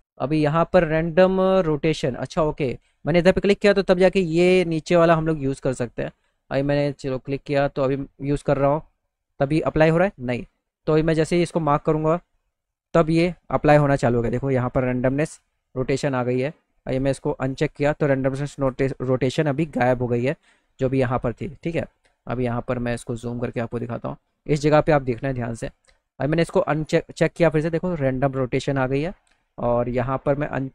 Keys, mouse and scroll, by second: 4.1 click, 5.9 click, 6.6 click, 7.6-9.6 drag, 11.6 click, 16.9 click, 19.9 middle click, 20.3 middle click, 21.1 middle click, 22.7 middle click, 26.8 click.